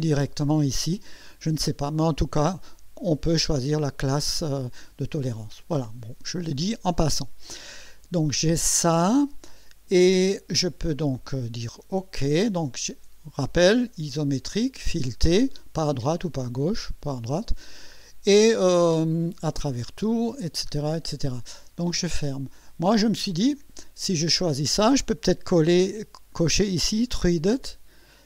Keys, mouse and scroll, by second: 22.6 click, 24.4 click, 25.8 scroll down 2, 28.1-28.2 scroll down 4.